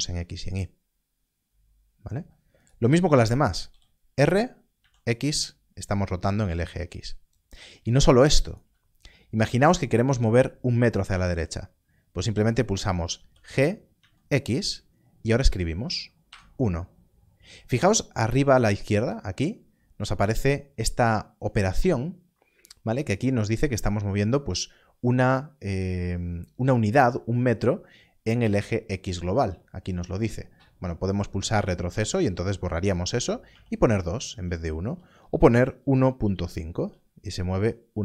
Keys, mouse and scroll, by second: 2.6 shift+z, 3.7 r, 4.8 x, 8.5 right click, 13.1 right click, 13.9 g, 14.0 x, 16.2 x, 31.9 BackSpace, 35.4 1, 35.8 ., 36.2 5, 37.9 BackSpace.